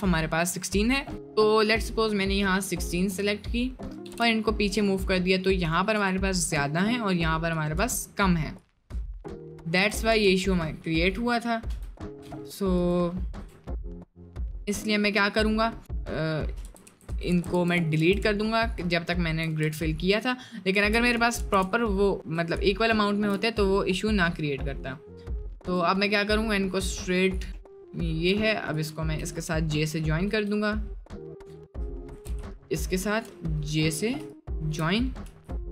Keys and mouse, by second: 3.2 click, 4.0 g, 5.5 click, 6.5 click, 7.6 click, 8.6 click, 8.9-9.7 space, 9.8 Tab, 10.1 space, 11.0 drag, 11.8 Delete, 12.8 right click, 13.4 Tab, 13.9 middle click, 15.3 click, 16.7-21.0 ctrl+z, 21.3 ctrl+shift+z, 22.5 ctrl+z, 25.6 right click, 27.3 right click, 28.7 shift+click, 30.3 j, 32.3 ctrl+z, 32.7 shift+click, 34.3 ctrl+click, 35.3 j.